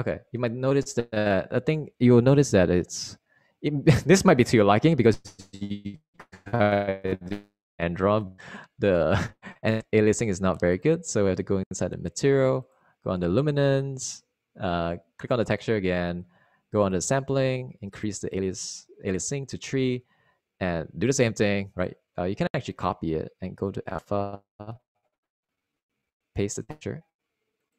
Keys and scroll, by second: 3.1 super+r, 7.1 super+r.